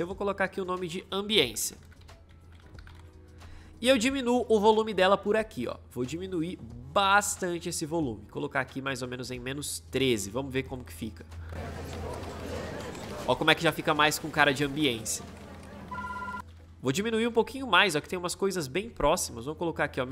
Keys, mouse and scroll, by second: 1.1-3.3 typing, 11.3 space, 16.1 space.